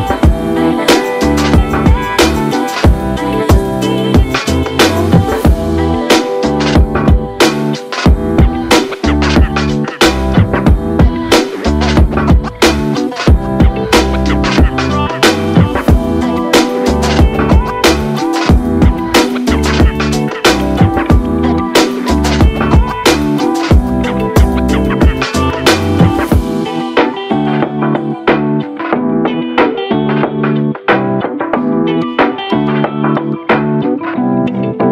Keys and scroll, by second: 2.0 v, 2.2 v, 2.2 v, 3.5 v, 3.8 v, 6.8 ctrl+1, 10.5 typing, 14.4 ctrl+z, 17.2 typing, 32.3-34.9 typing.